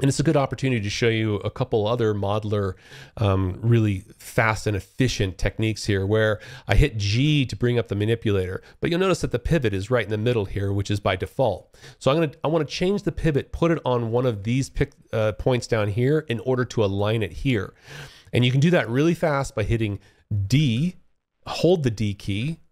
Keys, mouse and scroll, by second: 6.2 g, 7.8 alt+click, 10.1 alt+click, 19.6 d, 21.5-22.7 d.